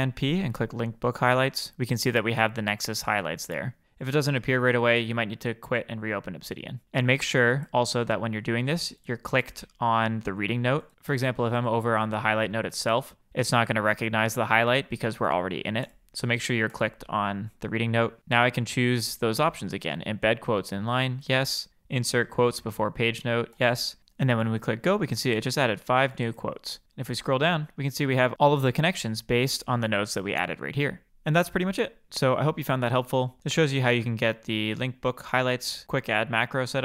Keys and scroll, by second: 12.1 super+p.